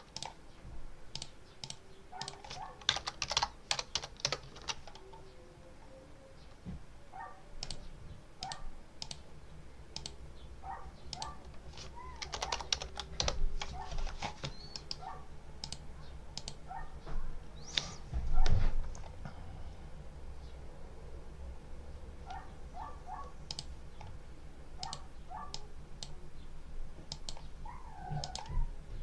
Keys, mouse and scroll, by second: 0.0 click, 1.0 click, 1.5 click, 2.1 click, 2.5-3.8 typing, 4.1 Return, 4.4 ctrl+s, 7.5 click, 8.3 click, 8.9 click, 9.8 click, 11.0 click, 11.8-13.3 typing, 14.6 middle click, 15.5 click, 16.2 click, 23.3 click, 24.7 click, 25.4 click, 27.0 click, 28.1 click, 28.9 click.